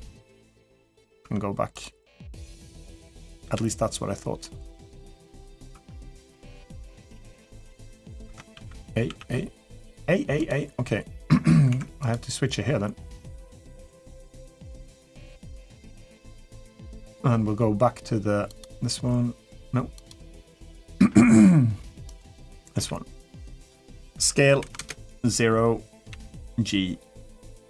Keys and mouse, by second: 0.6 Tab, 1.0 Tab, 2.2 click, 2.7 click, 3.2 l, 5.5 Tab, 7.7 click, 8.0 Tab, 8.3 a, 8.9 a, 10.3-11.5 drag, 11.8-14.4 drag, 16.6 click, 22.5 s, 25.8 s, 25.8 g.